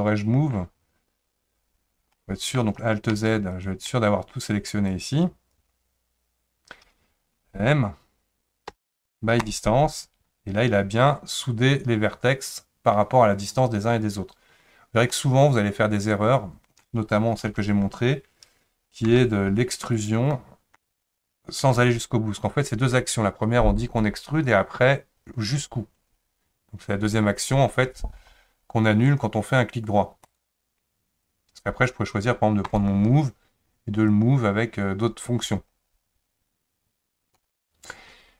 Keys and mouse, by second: 2.2 middle click, 3.1 alt+z, 3.9 middle click, 4.9 click, 8.7 m, 15.1-16.8 middle drag, 17.4 alt+z, 19.1 3, 20.0 click, 20.3 middle click, 21.6 e, 32.7 click, 34.1 click, 34.3-37.4 drag.